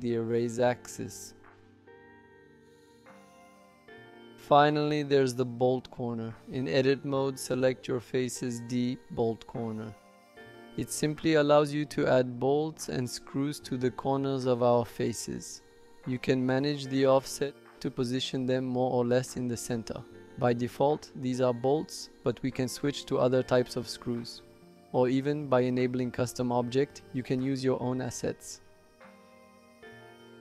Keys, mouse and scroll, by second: 2.9 middle click, 3.7 click, 4.0 middle click, 4.1 click, 4.1 middle click, 4.8 click, 4.9-6.3 middle drag, 15.6-18.8 drag, 19.2 middle click, 19.9 shift+middle click, 21.1 click, 22.3 shift+middle click, 23.7 click, 25.9 click, 27.2-27.6 middle drag, 29.5 click.